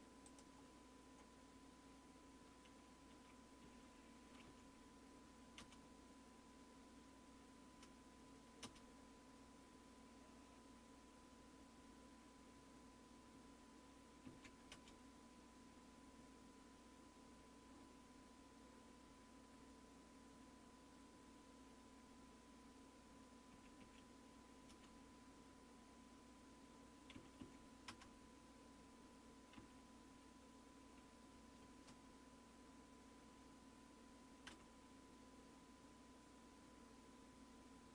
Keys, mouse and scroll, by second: 3.1 Down, 3.6 Down, 4.4 Down, 4.4 Return, 4.4 Escape, 5.6 Return, 8.6 Return, 12.6 Escape, 14.2 Down, 14.7 Return, 16.2 Escape, 19.5 Escape, 23.5 Up, 23.8 Up, 24.7 Return, 27.1 Down, 27.4 Down, 27.9 Return, 29.6 Down, 31.6 space, 34.5 Return.